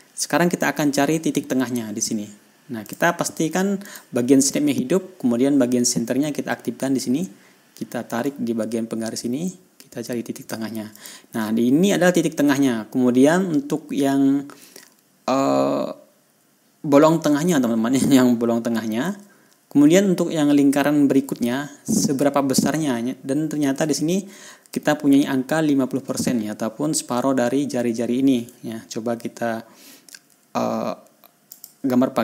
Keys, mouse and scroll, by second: 0.2 ctrl+scroll up 2, 0.6 ctrl+scroll down 2, 0.9 ctrl+scroll up 2, 3.3 click, 4.3 click, 8.7-11.1 drag, 11.4 click, 14.3-14.6 ctrl+scroll up 2, 14.8 ctrl+scroll down 2, 24.4 ctrl+scroll up 2, 29.0 ctrl+scroll down 2, 29.4 ctrl+scroll up 1, 32.0 click.